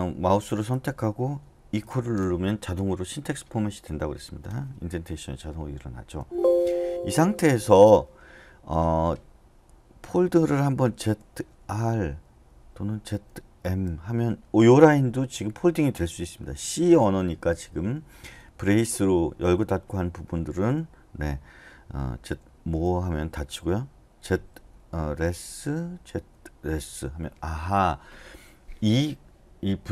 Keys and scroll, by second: 1.8 typing, 6.2 Escape, 11.0-11.6 typing, 13.1-13.6 typing, 22.2-22.6 typing, 24.3-26.7 typing.